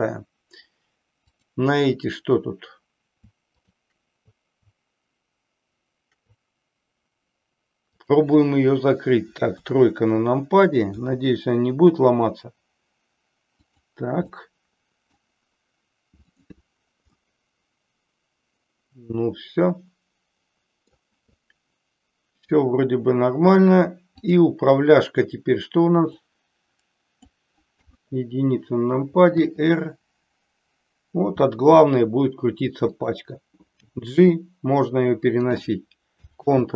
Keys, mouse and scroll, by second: 1.2 click, 3.6-4.1 shift+drag, 9.6 KP_3, 11.0 r, 13.7 click, 14.5-15.1 middle drag, 16.2 click, 17.2-21.0 middle drag, 22.5 click, 26.1-27.3 drag, 27.9 KP_1, 29.3 r, 33.0 click, 33.8 g, 35.3 click, 36.3 ctrl+z.